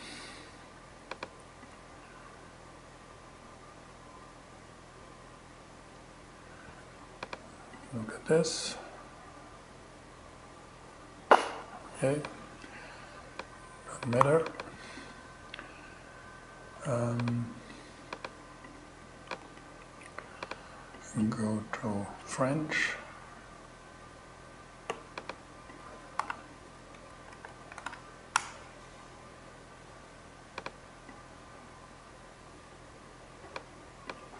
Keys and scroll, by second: 13.6 super+c, 18.9 super+v, 25.5-27.8 typing.